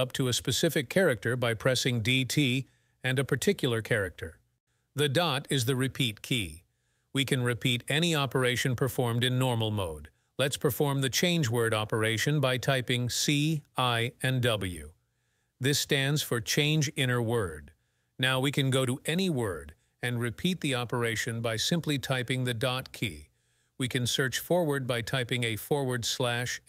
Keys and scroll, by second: 0.7 shift+a, 10.4-14.2 typing, 14.4 Escape, 15.5 j, 16.1 j, 17.7 ., 19.0-23.2 typing, 26.4-26.6 typing.